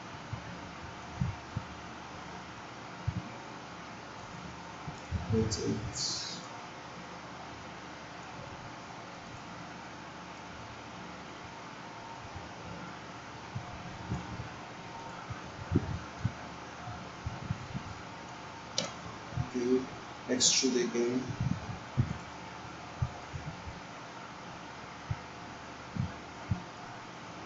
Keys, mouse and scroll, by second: 6.7-8.3 drag.